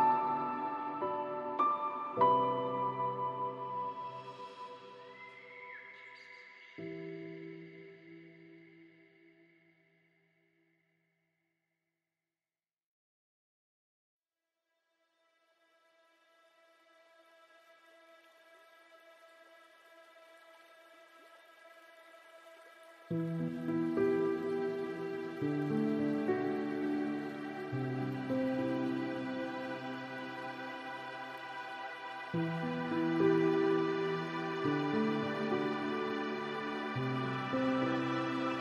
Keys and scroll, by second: 7.1 ctrl+space.